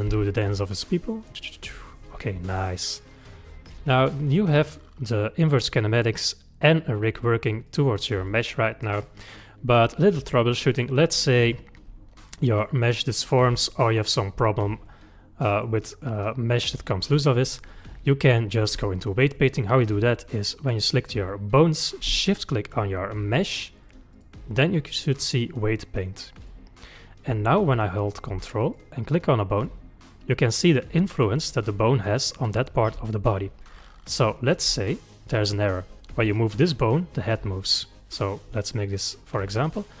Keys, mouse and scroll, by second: 0.1 g, 2.7-5.7 middle drag, 7.7 click, 8.3-9.4 drag, 9.7-14.1 middle drag, 14.8-20.6 middle drag, 20.6 click, 22.3 shift+click, 24.1-27.2 drag, 28.7 ctrl+click, 29.6 ctrl+click, 30.4 ctrl+click, 31.1 ctrl+click, 34.9 ctrl+click, 38.1 click, 38.9-40.0 middle drag.